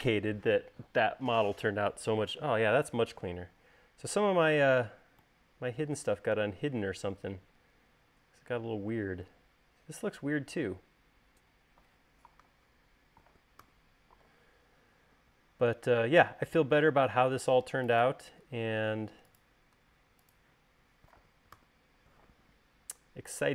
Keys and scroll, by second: 14.5 u, 22.4 u.